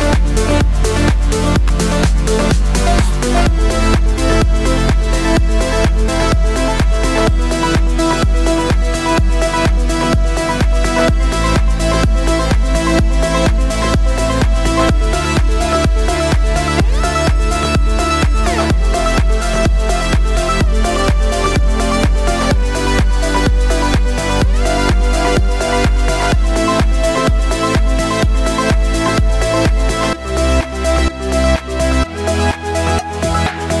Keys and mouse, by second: 0.4 s, 1.4-10.4 drag, 8.1 KP_1, 8.9 z, 10.1 shift+d, 10.4-12.6 middle drag, 10.6 r, 12.6-16.3 drag, 13.2 z, 14.9 KP_1, 15.0 KP_3, 15.9 r, 16.3-32.3 middle drag, 16.4 g, 17.9 s, 19.8 shift+d, 20.2 r, 20.7 g, 21.7 r, 25.5 shift+d, 26.6 r, 27.3 s, 29.1 s, 30.5 g, 32.3-33.8 drag.